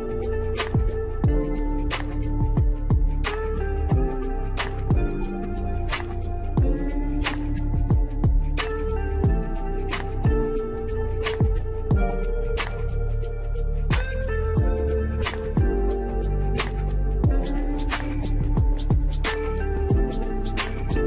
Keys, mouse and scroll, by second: 3.5 KP_0, 5.2 ctrl+z, 7.6-8.0 scroll down 3, 8.3 click, 8.4-9.2 middle drag, 9.2 scroll down 2, 9.9 s, 12.5 s, 13.8 scroll down 2, 14.0 middle click, 14.5-16.4 scroll up 1, 16.4 KP_0, 18.2 scroll up 3, 18.4-18.8 middle drag, 18.8 scroll up 1, 19.0-20.2 shift+middle drag, 20.2 click, 20.7 g.